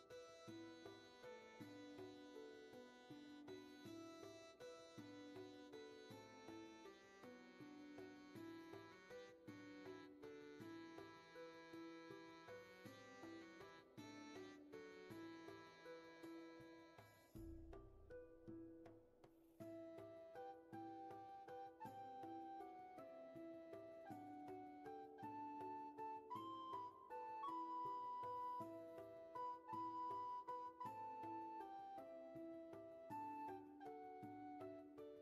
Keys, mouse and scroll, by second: 7.5-8.2 scroll up 1, 8.8 space, 9.4-11.3 scroll up 1, 14.8 ctrl+z, 20.7 ctrl+z, 32.0 scroll down 1, 33.5-34.2 scroll up 1, 34.2 ctrl+z, 35.0-35.2 scroll up 1.